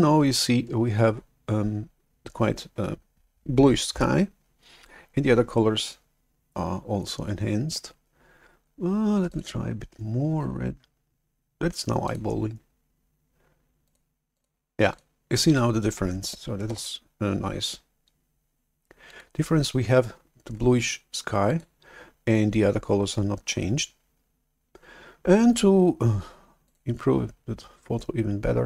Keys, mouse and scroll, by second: 9.4-10.7 drag, 12.2-14.9 drag, 15.2 click, 16.8 shift+super+F11, 19.1 click, 21.4-24.0 drag, 26.8-28.6 drag.